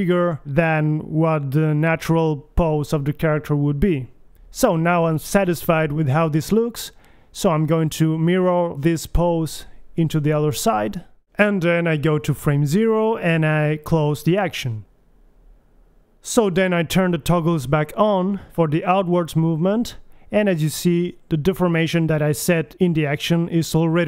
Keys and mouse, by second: 0.2 KP_1, 0.6 a, 1.3 a, 2.1 b, 10.0 a, 11.2 Left, 15.8-19.9 drag, 20.4-22.1 drag, 21.7 a, 22.0 a, 22.8 alt+g, 22.8 a, 23.2 alt+r, 23.3 alt+s, 23.5 a.